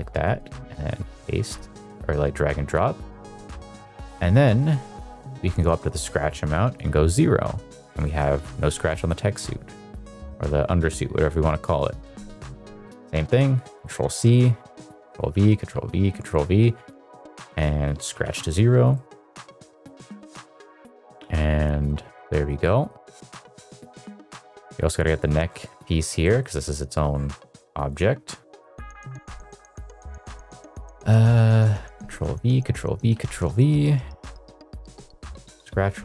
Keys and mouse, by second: 0.3 click, 0.8 click, 4.1 middle click, 5.5-6.8 drag, 7.9 shift+middle click, 8.9 shift+middle click, 13.0 ctrl+c, 13.6 middle drag, 14.7 ctrl+v, 15.2 ctrl+v, 15.7 ctrl+v, 17.4 click, 18.9 shift+middle click, 19.1 shift+middle drag, 19.5 middle drag, 20.1 middle drag, 20.5-20.9 middle drag, 21.2-21.8 middle drag, 22.1-22.4 middle drag, 22.6 middle drag, 23.1-23.8 middle drag, 24.0 shift+middle drag, 24.3 shift+middle drag, 25.6 middle click, 26.2 middle click, 27.8-28.9 drag, 30.4 middle click, 32.1 ctrl+v, 32.6 ctrl+v, 33.1 ctrl+v, 33.5 middle click, 35.2 click.